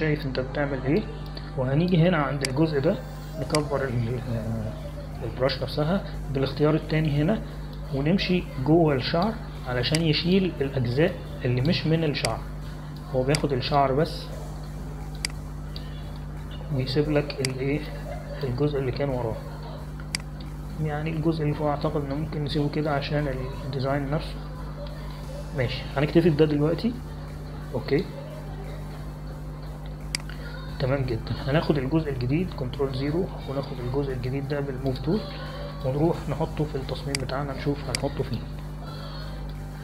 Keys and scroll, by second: 0.7 ctrl+=, 1.9 space, 6.3-7.3 typing, 34.7 ctrl+0.